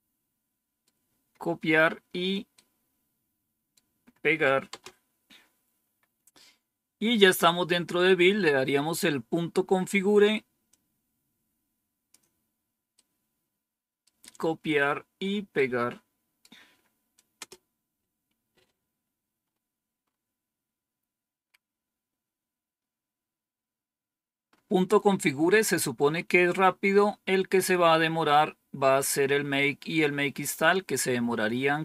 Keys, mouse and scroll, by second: 2.5-3.6 right drag, 4.6 Return, 8.2-8.9 scroll down 2, 10.6-12.0 drag, 12.9-13.9 right drag, 15.4 right click, 17.3 Return, 21.3 scroll down 2, 21.9-22.6 scroll down 2, 24.4 scroll up 2, 26.0 scroll up 2.